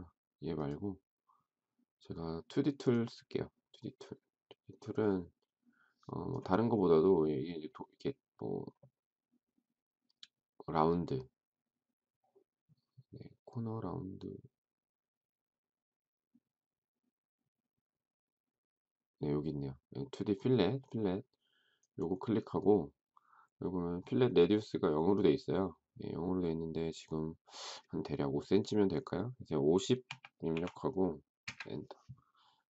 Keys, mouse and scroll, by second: 29.9-30.4 typing, 31.2 Return.